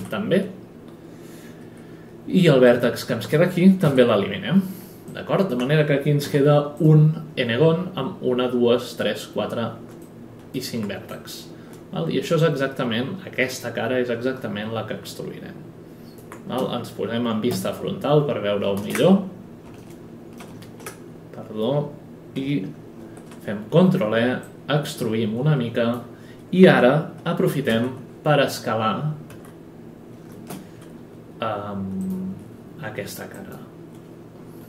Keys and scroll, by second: 1.6 F9, 3.8 Delete, 6.2 F11, 16.6-17.5 typing, 18.7 ctrl+space, 23.0 ctrl+e, 27.7 r, 29.3 e.